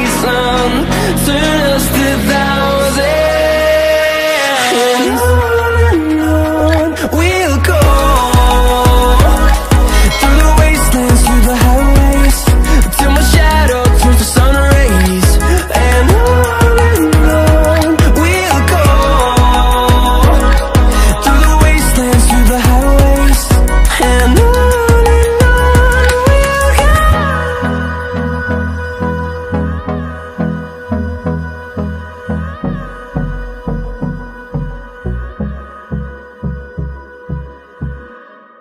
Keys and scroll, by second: 25.4 ctrl+z, 32.2 ctrl+a, 32.8 ctrl+t.